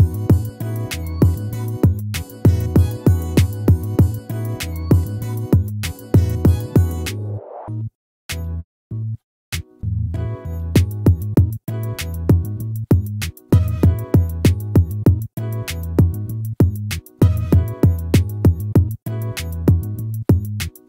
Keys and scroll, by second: 12.9 ctrl+-.